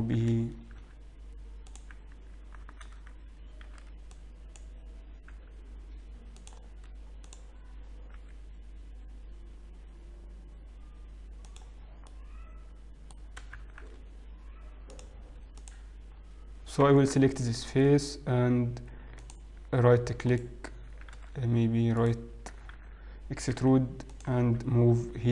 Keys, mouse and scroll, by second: 0.9 z, 3.0 alt+a, 3.8 b, 5.4 g, 7.6 click, 9.6 g, 11.9-12.6 scroll down 3, 12.3 middle click, 13.7 shift+z, 15.0 click, 16.5 click, 16.5-16.8 scroll down 2, 16.8 KP_1, 17.3-18.2 scroll up 5, 18.3-18.7 scroll down 3, 18.7-19.2 scroll up 1, 19.9 ctrl+click, 20.4 ctrl+right click, 21.2 ctrl+z, 22.1 ctrl+right click, 23.0 ctrl+z, 24.8 e, 24.8 g.